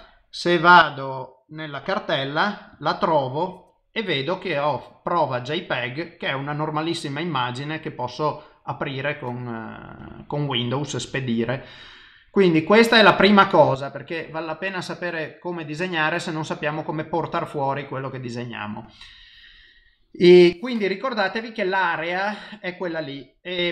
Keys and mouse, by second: 21.2 ctrl+middle click.